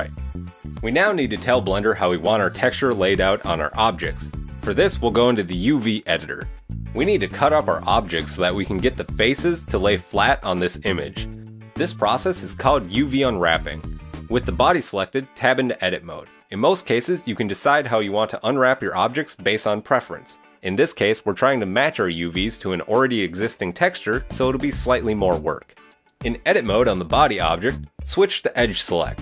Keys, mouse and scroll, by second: 5.4 click, 8.7 middle click, 12.5 middle click, 14.7 middle click, 15.7 Tab, 28.3 click, 29.1 click.